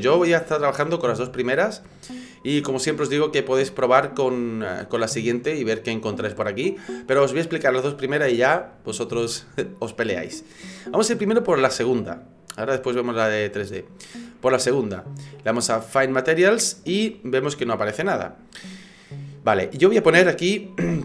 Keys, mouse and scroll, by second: 13.7 click.